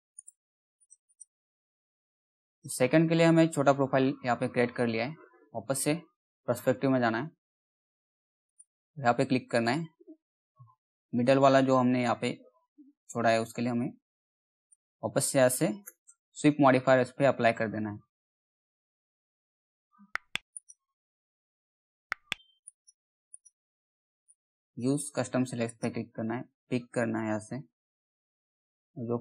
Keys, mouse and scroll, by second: 0.4 click, 0.9 scroll down 1, 2.1 click, 2.3-3.2 scroll down 1, 3.3 alt+middle click, 4.7 p, 6.1 alt+middle click, 6.6 scroll up 1, 7.1 middle click, 8.0 click, 11.1 scroll down 1, 11.5-14.1 middle drag, 14.1 click, 15.4 s, 18.1 s, 20.1 click, 21.3 middle click, 22.2-25.2 drag, 26.8 alt+middle click, 27.4 scroll up 1, 28.9 click.